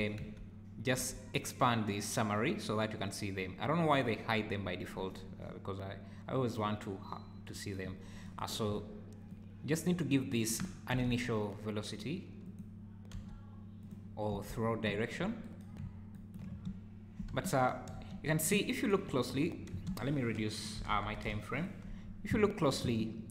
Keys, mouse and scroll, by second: 0.2 n, 1.0 n, 9.3 shift+right click, 10.9 r, 13.1 g, 14.3 z, 14.9 `, 16.1 shift+right click, 16.5 space, 17.5 Escape, 17.9 space, 19.7 space, 20.5 click, 21.2 KP_0, 22.5 shift+right click, 22.8 space.